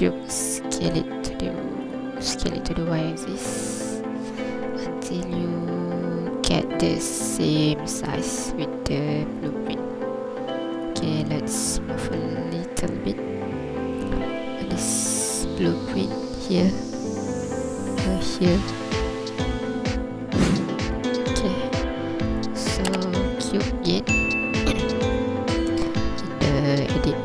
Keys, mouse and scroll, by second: 0.2 Tab, 0.2 a, 0.5 s, 1.9 click, 2.2 s, 2.5 y, 9.4 click, 10.5 Tab, 10.8 right click, 11.3-11.8 scroll up 2, 11.8 ctrl+click, 13.6 g, 14.0 y, 21.0 click, 22.3 right click, 25.1 Tab.